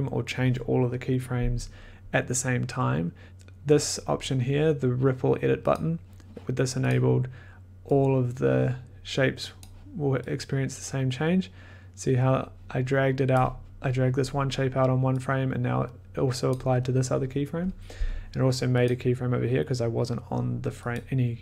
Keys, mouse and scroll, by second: 5.7 click, 6.8 click, 13.3 click, 16.4 click, 18.8 click.